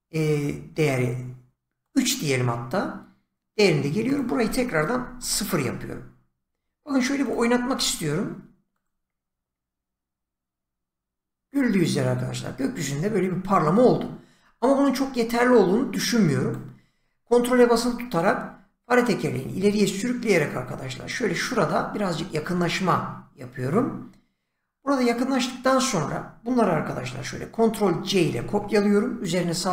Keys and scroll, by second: 4.9 0, 5.2 Return, 28.2 ctrl+c.